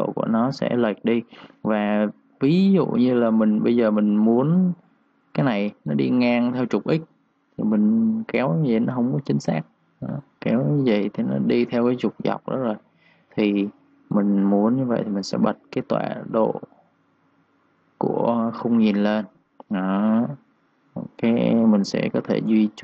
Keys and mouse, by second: 2.1-4.4 typing, 2.2 click, 3.1 click, 4.0 click, 8.2 click, 10.4 z, 10.9 click, 12.2 ctrl+z, 15.3 click, 18.4 click, 21.6 ctrl+z, 22.2 click, 22.5-22.8 typing.